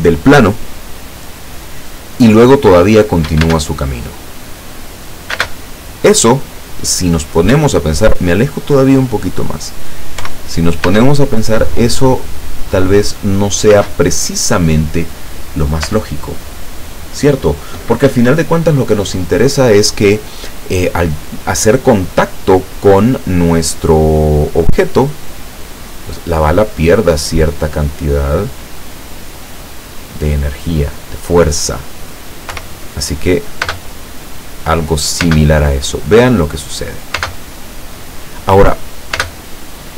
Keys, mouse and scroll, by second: 3.6 space, 5.4 space, 7.6 Escape, 8.3-8.9 scroll down 2, 9.3 scroll up 2, 10.3 p, 10.7 scroll up 1, 11.0 space, 13.9 space, 15.9 space, 18.1 Escape, 24.4 click, 28.1 click, 29.0 click, 30.7 click, 32.5 p, 33.7 space, 35.4 space, 36.0-37.3 middle drag, 37.3 space, 39.3 space.